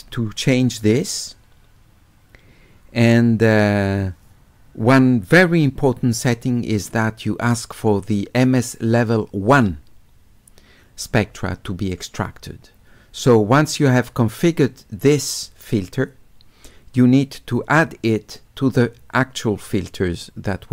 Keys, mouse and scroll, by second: 7.7 click, 9.5 click.